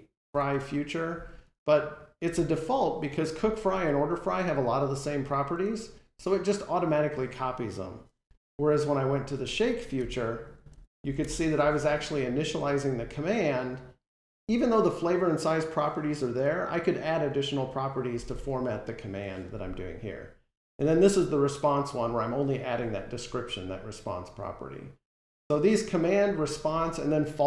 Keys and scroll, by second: 9.8 alt+End.